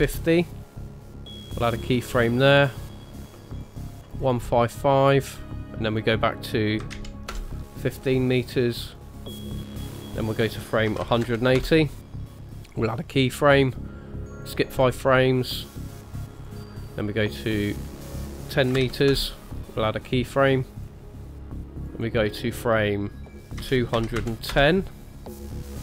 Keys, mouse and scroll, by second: 1.6 click, 3.5 click, 3.8 click, 4.1 click, 4.6 click, 5.8 click, 7.3 ", 8.9 click, 10.1 click, 12.9 click, 14.4 click, 14.6 click, 14.9 click, 15.1 click, 16.4 click, 17.9 click, 20.8 click, 21.9 click.